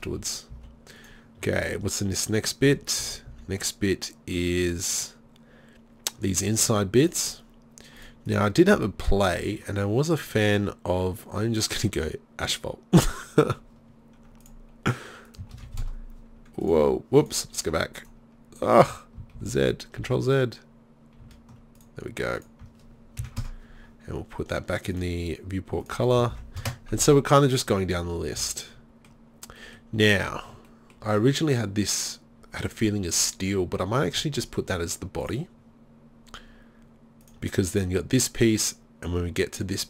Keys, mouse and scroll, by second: 0.1 z, 0.5 z, 2.7 z, 3.0 z, 3.3 z, 19.5 ctrl+z, 20.1 ctrl+z, 21.3 ctrl+z, 25.0-28.1 drag, 28.2 middle click, 28.4 z, 29.1 middle drag, 30.3 middle click, 35.3-37.4 middle drag.